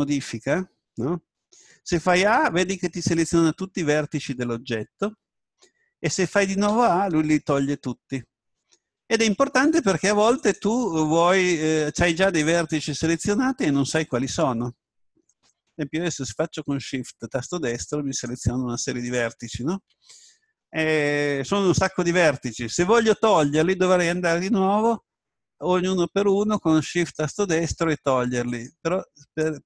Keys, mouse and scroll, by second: 1.9 a, 8.1 a, 10.4 right click, 12.6-17.0 right drag, 18.1-21.1 right drag, 27.0-29.6 right drag.